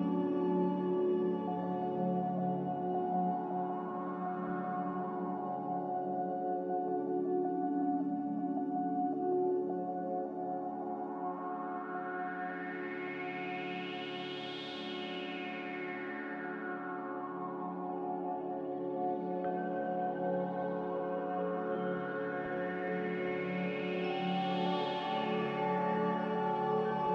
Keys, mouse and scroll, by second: 10.4 Delete, 12.6 Delete, 14.5 z, 16.1-17.0 typing, 19.8 typing, 20.1 Return, 22.4 Escape, 23.6-24.4 typing.